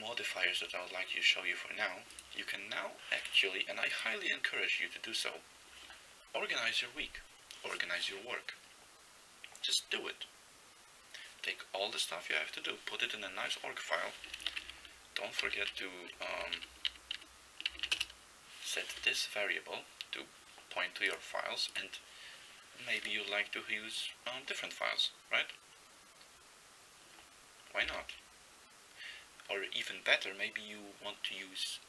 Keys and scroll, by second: 14.6 ctrl+x, 14.6 ctrl+b, 15.5 ctrl+n, 16.4 ctrl+n, 16.6 ctrl+n, 16.9 ctrl+n, 17.2 ctrl+n, 17.7 ctrl+n, 18.0 Return.